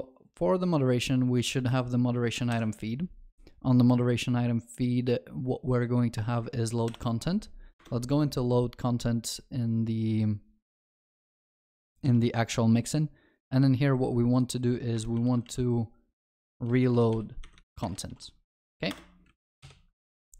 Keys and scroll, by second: 2.6 ctrl+b, 6.9 ctrl+b, 12.1 ctrl+b.